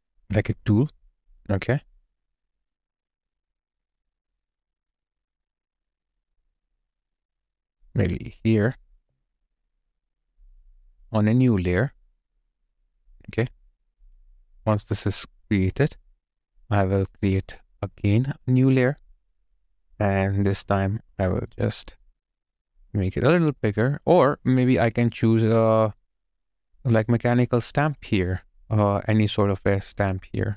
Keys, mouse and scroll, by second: 8.9 alt+right click, 9.4 alt+middle click, 10.1 alt+click, 14.2 space.